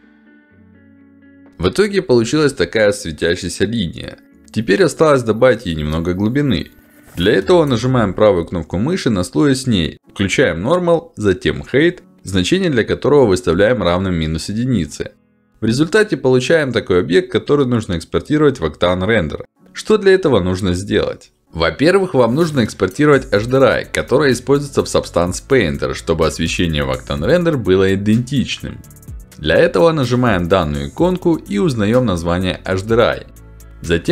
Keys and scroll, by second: 33.8 ctrl+alt+d.